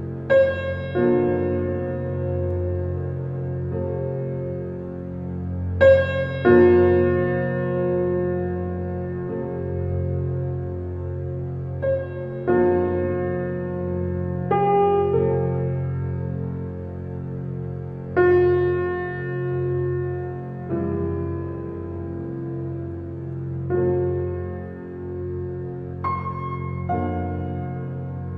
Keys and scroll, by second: 7.9 ctrl+t, 12.6 alt+shift+space.